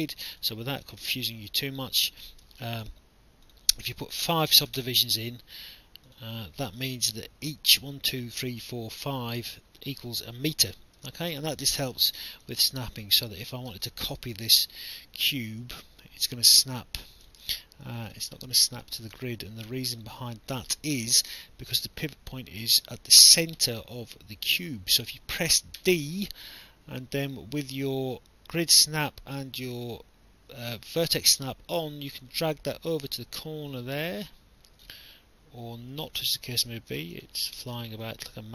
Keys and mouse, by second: 0.1 click, 2.2 click, 3.5 click, 4.2 BackSpace, 4.6 5, 4.8 Return, 4.8 KP_Enter, 6.1 click, 12.6 alt+click, 13.7 ctrl+d, 14.5 click, 17.7 alt+click, 19.2 alt+middle click, 20.2 alt+click, 21.9 alt+click, 25.8 d, 31.1 alt+click, 32.3 click, 35.0 alt+click, 36.8 ctrl+z, 37.4 alt+click, 38.0 alt+click.